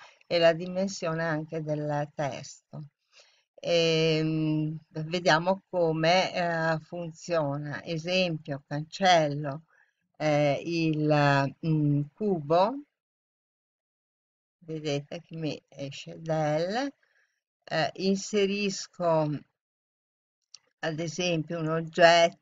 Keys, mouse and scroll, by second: 8.4 right click, 11.8 Delete, 21.4 click.